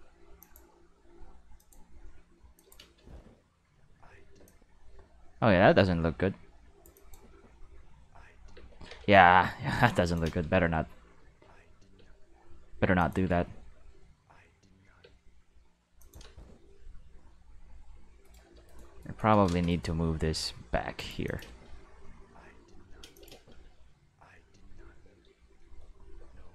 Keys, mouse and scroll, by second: 0.4 click, 1.6 click, 2.5 click, 2.8 space, 4.4 space, 4.4-6.8 drag, 6.9 click, 7.3 space, 8.5 space, 8.9 ctrl+z, 9.1 ctrl+z, 10.0 click, 10.2 space, 11.9 space, 13.0 click, 13.2 space, 15.0 space, 16.0 click, 16.2 space, 17.1 space, 18.2 right click, 18.7 shift+right click, 19.0 shift+right click, 19.7 shift+right click, 20.0 g, 21.0 click, 21.2 click, 21.4 space, 23.0 space, 23.1 click, 23.3 space, 25.0 space, 26.2 space.